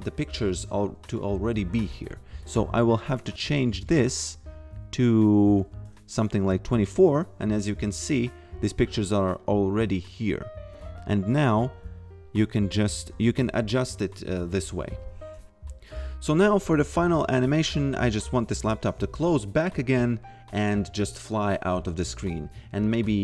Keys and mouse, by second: 2.7 click, 11.7 click, 12.4 f, 15.0 click, 16.8 click.